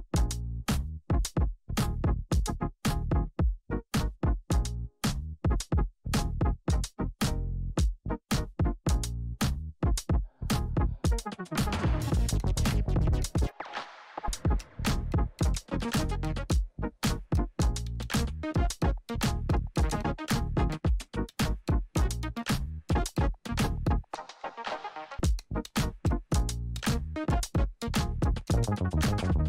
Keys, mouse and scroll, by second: 6.0 ctrl+z, 6.5-15.2 drag, 20.6-20.9 typing, 21.4-29.4 drag.